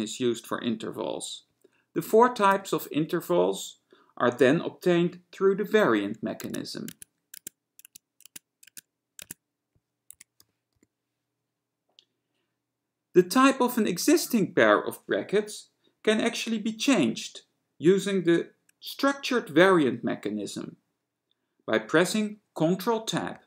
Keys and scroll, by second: 2.8 [, 6.6 Tab, 7.1 Tab, 7.5 Tab, 8.0 Tab, 8.4 Tab, 8.8 Tab, 9.4 Tab, 10.1-11.5 typing.